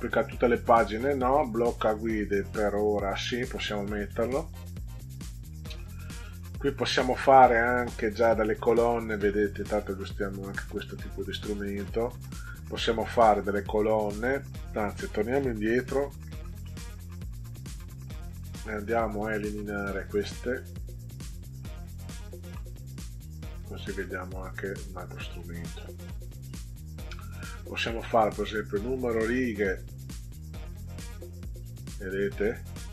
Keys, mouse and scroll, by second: 4.0 click, 6.1 click, 10.3-12.1 drag, 15.8 ctrl+z, 16.3 middle drag, 16.9 ctrl+z, 17.3 ctrl+z, 17.8 ctrl+z, 18.9 click, 20.1 click, 20.5 click, 21.5 click, 22.0 shift+click, 22.3 shift+click, 22.5-22.9 scroll down 2, 23.1 click, 24.4 click, 26.4 click, 30.3 click, 31.5 click, 32.3 click.